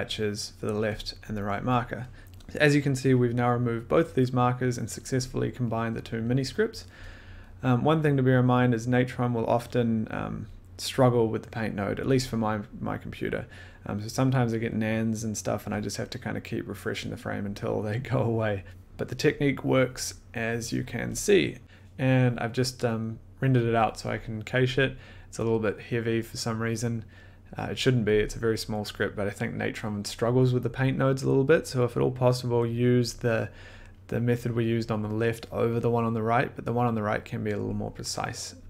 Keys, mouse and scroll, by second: 0.0 click, 1.2 click, 1.7 click, 7.5 scroll, 8.1-8.5 scroll, 9.1-14.3 middle drag.